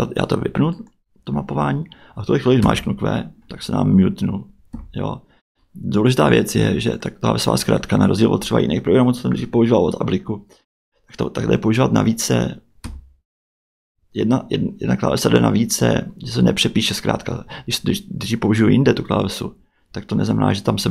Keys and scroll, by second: 2.6 q, 4.7 q, 12.8 q.